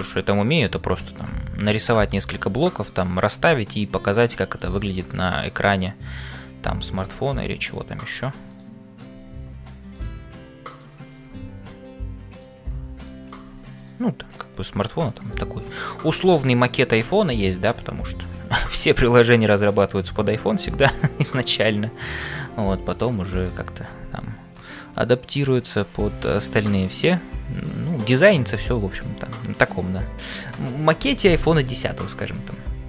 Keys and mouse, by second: 0.0-32.8 typing, 2.7 click, 5.3 shift+middle click, 8.5 click, 12.9 click, 14.3 click, 17.5 middle click, 27.6 click.